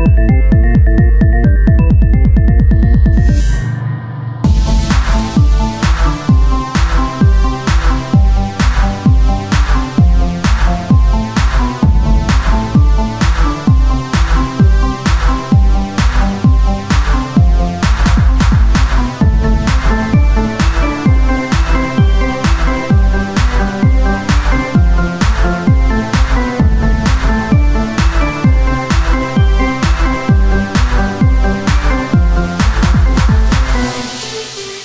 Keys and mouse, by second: 0.8-2.3 middle drag, 2.3-3.4 drag, 2.3 shift+a, 3.4 s, 6.9-10.4 drag, 10.4 Tab, 11.3-12.8 drag, 15.3 e, 21.9-23.8 drag, 23.8 s, 25.3-29.2 drag, 26.0 s, 29.2 e, 31.9 s, 33.5 r, 34.4-34.8 drag.